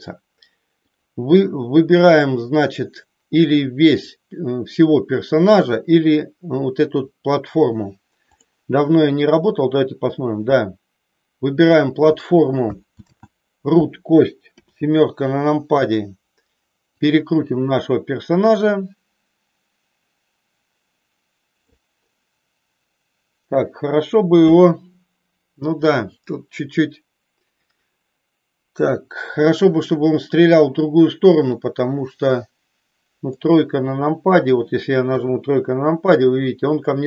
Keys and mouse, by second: 0.7 click, 9.6-11.5 drag, 13.1 ctrl+z, 14.5 KP_7, 16.9-21.7 drag, 31.6-33.5 middle drag, 35.1 KP_3.